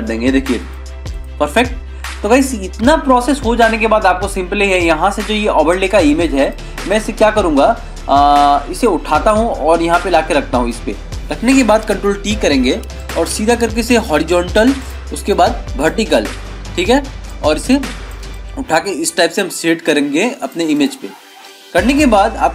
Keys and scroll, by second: 3.1 ctrl+-, 12.5 ctrl+t.